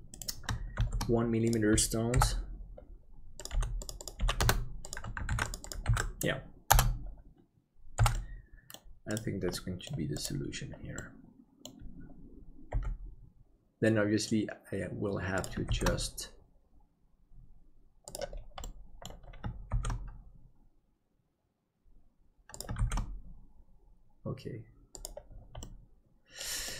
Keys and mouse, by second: 0.8 shift+d, 2.2 n, 5.2 ctrl+click, 5.8-7.9 ctrl+drag, 7.9 n, 8.2 middle click, 9.2 right click, 9.5 middle click, 10.9 middle click, 12.7 g, 15.7 shift+d, 18.8 middle click, 19.7 shift+d, 25.7 middle click.